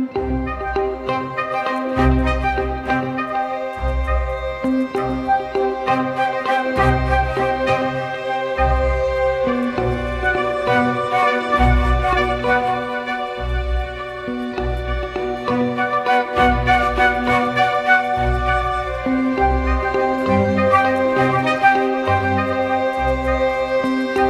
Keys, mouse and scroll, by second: 4.6 double click, 14.7-15.4 typing.